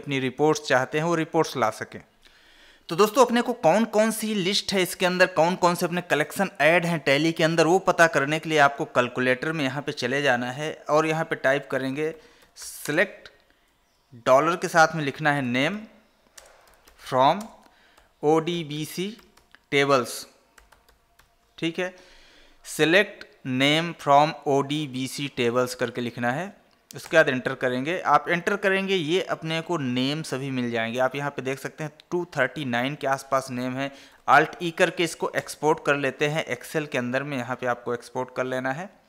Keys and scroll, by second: 2.2 Escape, 9.8 ctrl+n, 13.1 space, 16.7 space, 17.7 space, 34.4 alt+e.